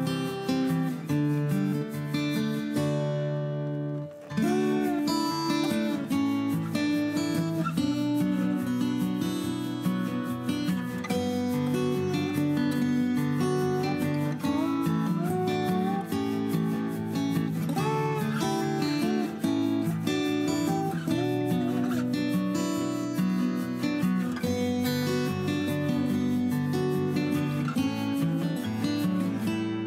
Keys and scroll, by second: 8.2 p, 9.6 Escape, 9.8 Escape, 9.9 Escape, 10.0 Escape, 10.1 Escape, 13.3 ctrl+c, 13.4 ctrl+v, 21.4 Delete, 26.9-29.3 typing.